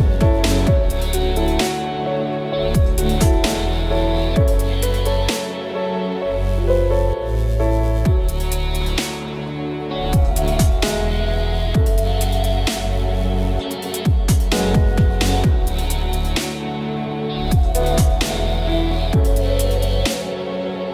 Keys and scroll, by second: 0.1 F6, 1.5 KP_2, 1.7 Return, 5.2 F6, 6.5 Return, 7.2 Left, 7.8 Return.